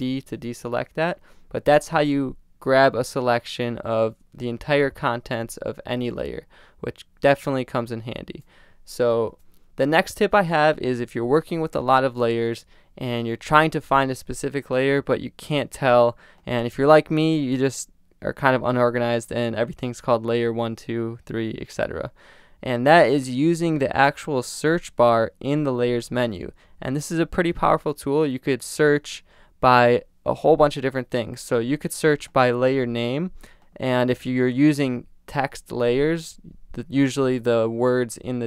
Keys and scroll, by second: 9.3 super+d.